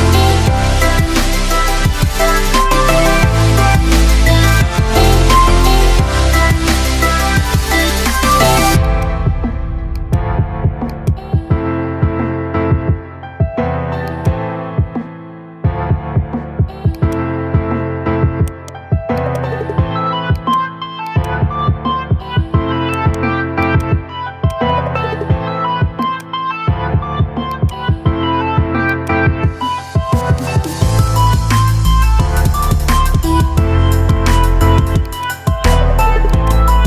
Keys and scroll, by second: 2.8 ctrl+v.